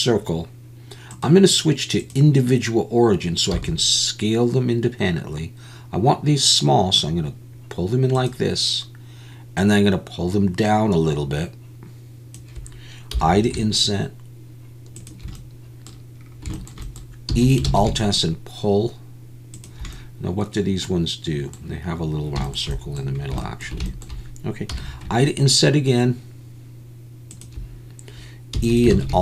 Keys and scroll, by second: 3.5 s, 17.3 e, 17.8 alt+s, 28.6 e, 28.9 alt+s.